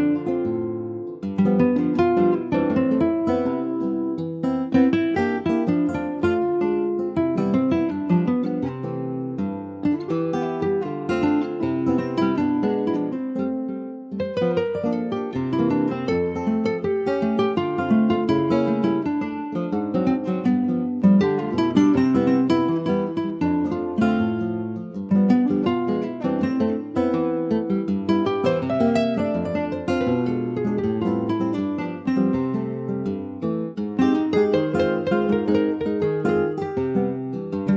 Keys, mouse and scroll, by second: 0.1 e, 2.1 click, 2.6-4.0 middle drag, 4.0 shift+click, 4.7-6.3 middle drag, 6.3 s, 10.5 middle click, 10.8 scroll up 1, 11.1 ctrl+s, 11.5 click, 12.0 shift+click, 12.4 shift+click, 12.9 middle click, 13.4 ctrl+s, 13.8 click, 14.3-14.9 scroll down 2, 14.9 ctrl+s, 15.1 alt+middle click, 15.8 alt+middle click, 16.3 alt+middle click, 16.7-17.3 alt+scroll down 2, 17.3 ctrl+s, 17.8 click, 19.1 alt+middle click, 20.0 ctrl+s, 20.5 alt+middle click, 21.6 click, 23.7 middle click, 24.2 ctrl+s, 24.5 middle click, 24.8-25.2 scroll up 2, 25.2 middle click, 25.4-26.3 scroll up 1, 26.3 2, 26.5 click, 27.6 alt+shift+click, 28.1 alt+shift+click, 29.1 alt+shift+click, 29.9 x, 31.9 x, 33.6 Tab, 33.8 click, 34.0-34.6 scroll down 2, 34.6 ctrl+s, 34.9 middle click, 35.4 Tab, 35.6 middle click, 35.8 scroll up 2, 36.0-37.1 shift+middle drag, 37.1 ctrl+r.